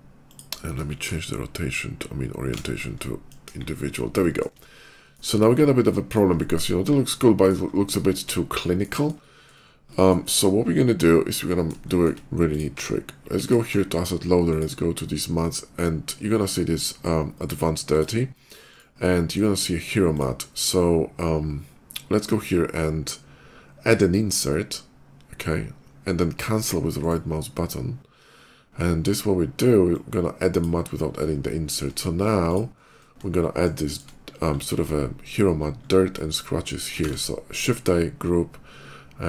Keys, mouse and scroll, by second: 0.0 click, 1.5 alt+shift+w, 2.7 alt+shift+middle click, 3.3 KP_5, 3.7 middle click, 4.1 shift+middle click, 4.5 shift+middle click, 5.4 shift+middle click, 5.6 shift+middle click, 6.2 shift+middle click, 7.0 shift+middle click, 7.5 shift+middle click, 7.8 shift+middle click, 8.4 shift+middle click, 9.0 shift+middle click, 9.7 shift+middle click, 11.7 shift+middle click, 12.3 shift+click, 12.6 q, 13.3 alt+click, 14.3 alt+click, 17.7 click, 18.3 click, 19.9 click, 24.1 click, 26.8 right click, 29.7 click, 31.3 shift+middle click, 32.3 shift+click, 32.5 shift+middle click, 33.2 shift+middle click, 33.7 shift+middle click, 34.1 shift+middle click, 34.3 shift+middle click, 34.4 shift+middle click, 35.4 shift+middle click, 35.6 shift+middle click, 35.8 shift+middle click, 36.6 click.